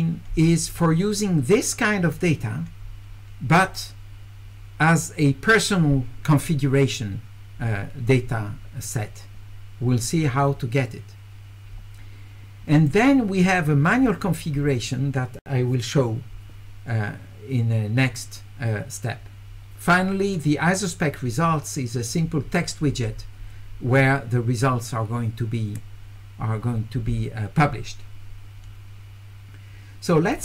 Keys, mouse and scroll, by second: 3.7 click, 12.8 click, 20.3 click, 30.3 click.